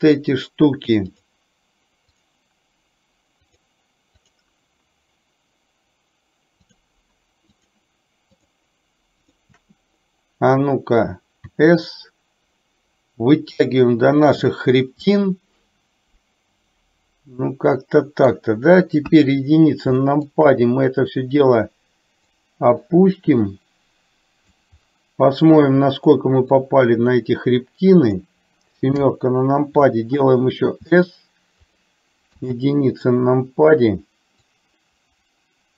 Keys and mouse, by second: 0.0 shift+click, 2.3 shift+click, 3.7 shift+click, 4.3 shift+click, 6.7 shift+click, 7.5 shift+click, 9.4 shift+click, 15.2-18.4 middle drag, 19.0 KP_1, 20.0 shift+middle click, 22.4-24.7 drag, 26.9-28.3 drag, 29.2 KP_7, 30.8 s, 32.3 KP_1, 34.5-35.7 drag.